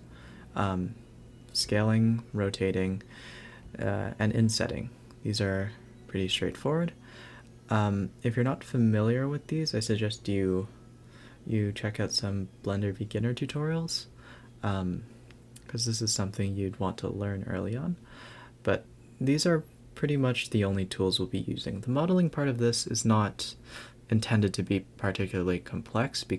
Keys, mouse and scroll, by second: 0.0 click, 0.9 shift+d, 2.3 Tab, 5.3 x, 5.6 Tab, 6.2 shift+d, 8.9 Tab, 9.7 click, 9.8 click, 10.3 click, 11.1 s, 12.2 Tab, 12.9 a, 13.0 a, 13.2 click, 14.3 a, 14.4 a, 14.5-15.0 scroll up 4, 15.1 click, 15.4-15.9 scroll down 2, 15.9 a, 16.1 a, 16.8-17.4 scroll up 5, 17.4 click, 18.1 ctrl+2, 19.7 ctrl+1, 21.2 ctrl+0, 21.6 Tab, 22.0 scroll up 1, 22.1-22.9 scroll down 3, 22.9-23.5 scroll down 3, 23.5-24.2 scroll down 3, 23.9 a, 24.2 a, 24.7-25.7 scroll down 1, 26.1 click.